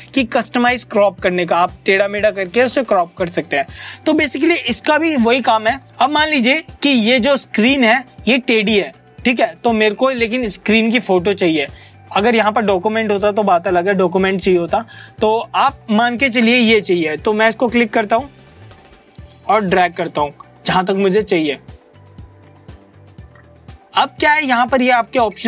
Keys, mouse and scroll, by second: 18.5 click.